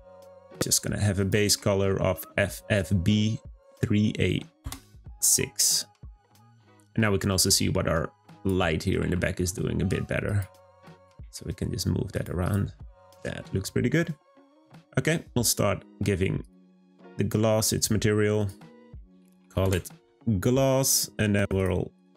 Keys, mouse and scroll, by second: 0.2 click, 6.2 click, 7.1 scroll up 1, 7.6 scroll up 1, 8.3 click, 8.9 g, 11.0 g, 12.4 click, 16.4 click, 17.7-19.5 drag, 19.5 s.